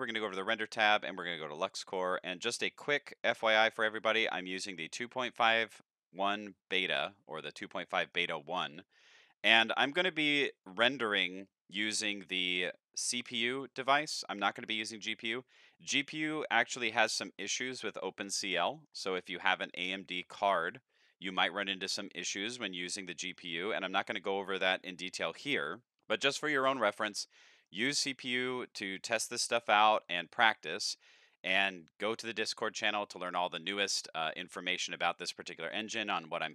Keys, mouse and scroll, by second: 0.0 click, 0.9 click, 2.1 click, 5.8-6.4 middle drag, 6.7-7.1 middle drag, 7.4 middle click, 7.9 middle drag, 10.6 click, 16.0-16.7 middle drag, 17.0-17.4 middle drag, 17.9-18.2 scroll up 2, 18.2 middle drag, 18.8 middle drag, 19.3 middle drag, 19.3 scroll down 3, 21.4-21.8 middle drag, 22.0 middle drag, 22.0 scroll up 1, 23.3-23.7 middle drag, 25.0 middle click, 27.2-27.6 middle drag, 28.7-33.6 middle drag, 33.9-34.2 scroll down 3, 34.4 shift+middle drag, 34.8-35.2 middle drag, 35.5 shift+middle drag, 36.0-36.4 middle drag.